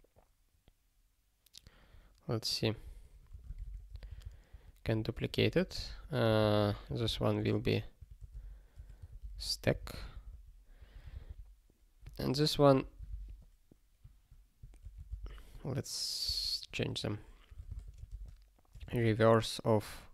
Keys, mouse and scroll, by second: 2.5 click, 2.8 ctrl+a, 3.3 ctrl+p, 3.6 ctrl+/, 3.9 ctrl+n, 4.0 ctrl+n, 4.5 ctrl+y, 4.8 Return, 5.1 ctrl+p, 5.7 Return, 5.9 ctrl+p, 6.3 ctrl+n, 6.4 ctrl+e, 6.8 alt+b, 7.4 alt+f, 8.0 -, 8.7 BackSpace, 9.0 t, 9.4 k, 9.8 ctrl+s, 9.9 ctrl+p, 11.1 alt+b, 12.2 ctrl+n, 12.8 ctrl+a, 13.1 ctrl+alt+k, 14.8 ctrl+f, 15.1 ctrl+alt+t, 16.2 ctrl+b, 17.0 (, 18.0 space, 18.7 BackSpace, 18.8 e, 18.8 space.